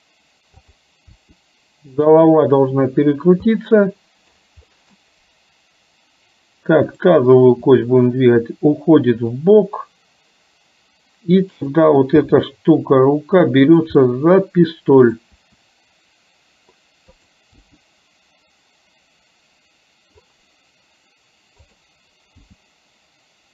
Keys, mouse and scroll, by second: 0.7 click, 1.3 r, 3.7 middle click, 4.8 middle click, 6.9 click, 7.5 r, 11.7 click, 12.2 g, 14.0-15.3 middle drag, 15.4 e, 17.3 click, 17.7 g, 21.7 click, 22.5 g.